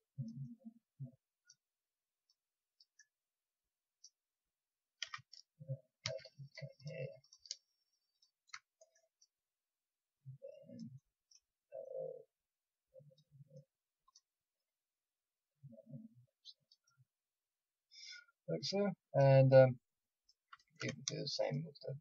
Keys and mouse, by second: 5.0 a, 6.0 ctrl+r, 7.2-17.2 drag, 18.7 middle click, 20.2-22.0 drag.